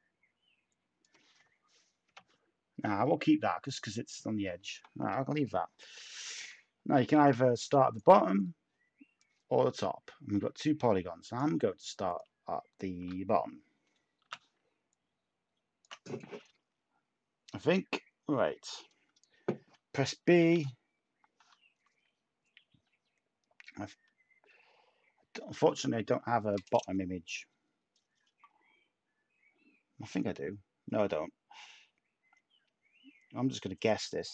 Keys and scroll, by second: 2.0 0, 2.1 Tab, 7.1 a, 12.8 shift+a, 14.2 t, 20.5 b.